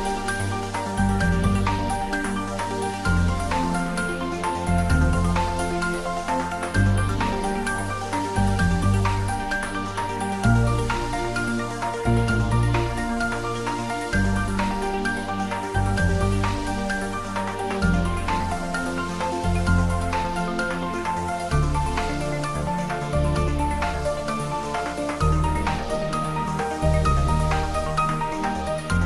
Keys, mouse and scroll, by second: 13.9 scroll down 1, 23.9 scroll down 1, 25.3 scroll down 1, 25.5 a, 28.1 g.